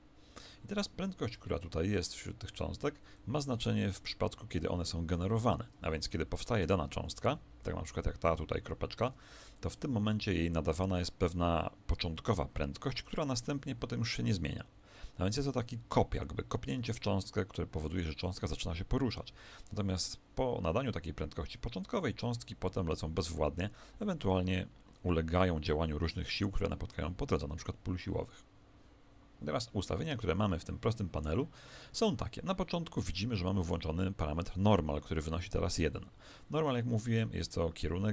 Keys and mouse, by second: 0.5-3.1 middle drag, 3.1 click, 6.5 middle click, 7.2 z.